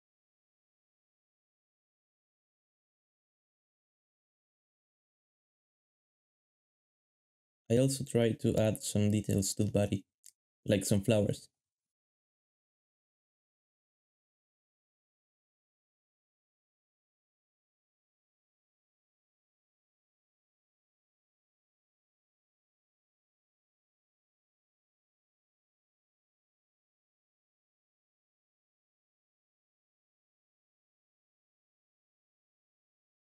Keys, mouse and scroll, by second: 8.6-13.7 typing, 12.3 alt+shift+z, 14.6 ctrl+b, 15.0 alt+shift+z, 15.2 alt+shift+z, 15.5 shift+middle click, 15.6 g, 15.9 shift+scroll up 1, 16.3 g, 20.1-24.1 typing, 22.6 shift+middle click, 24.7 alt+d, 25.2 g, 25.7 g, 26.5 ctrl+b, 27.0 ctrl+b, 28.6 ctrl+b, 28.9 shift+middle click, 29.0 shift+middle click, 29.2 alt+a, 29.5 shift+middle click, 31.6 alt+shift+z.